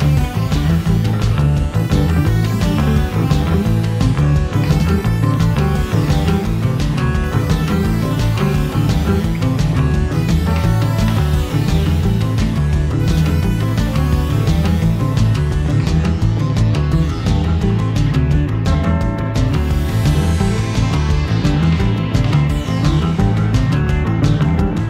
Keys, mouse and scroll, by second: 0.6 middle click, 0.8 middle click, 1.8 ctrl+z, 2.3-24.8 typing, 2.8 click, 4.8 middle click, 5.0 click, 5.2 middle click, 5.4 shift+click, 6.2 click, 6.2 middle click, 6.4 click, 8.7 middle click, 8.8 click, 8.9 click, 9.2 scroll down 1, 9.2 shift+middle click, 11.4 middle click, 12.5 click, 12.6 click, 16.1 middle click, 16.8 click, 17.3 shift+middle click, 17.4 alt+click, 18.4 middle click, 20.2 middle click, 20.3 middle click, 20.4 click, 20.7 shift+middle click, 20.9 click, 21.0 middle click, 21.2 middle click, 21.3 click, 21.7 click, 21.8 click.